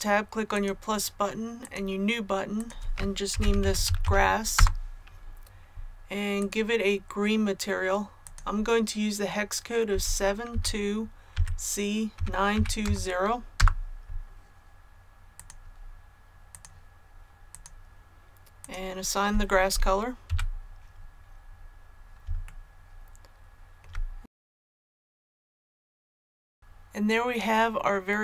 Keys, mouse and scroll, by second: 0.4 click, 3.2-3.9 typing, 4.5 Return, 6.3 click, 9.8-12.7 typing, 13.5 Return, 15.3 click, 20.2 a, 20.6 scroll down 1, 22.4-23.7 shift+middle drag, 24.2-24.5 scroll down 1, 25.1 shift+middle click.